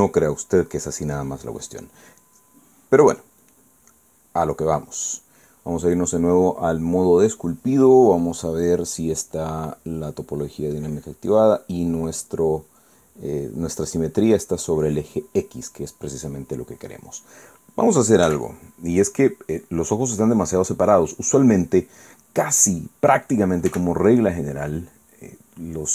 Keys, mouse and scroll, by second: 1.4 click, 2.2 click, 3.1 click, 4.4 click, 5.1 click, 5.8 click, 10.6-12.9 drag, 15.7 click, 16.8 click, 17.8 click, 19.2 f, 20.5 click, 24.7 f, 25.7 click.